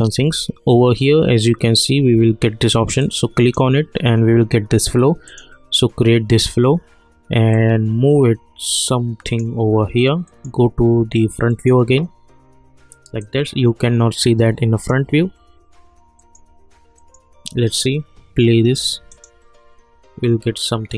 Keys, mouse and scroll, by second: 3.0-5.3 drag, 7.5-10.2 drag, 10.2 middle click, 13.2-16.2 drag, 16.2 middle click, 19.1 click.